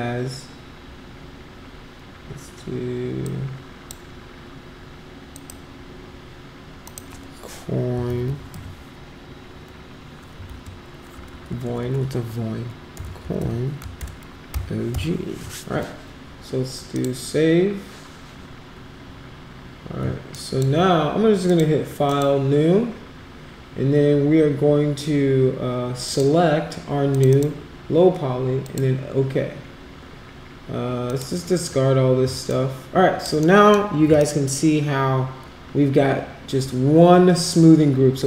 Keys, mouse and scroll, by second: 3.2 click, 5.3 click, 6.8 click, 7.7-8.7 typing, 10.4 shift+-, 11.3 BackSpace, 12.7-14.5 typing, 16.9 click, 20.3 alt+click, 21.4 click, 22.0 click, 26.0 click, 27.1 click, 27.3 click, 28.6 click, 31.0 click, 32.4 alt+click, 33.4 alt+middle click, 34.2-38.2 shift+right drag.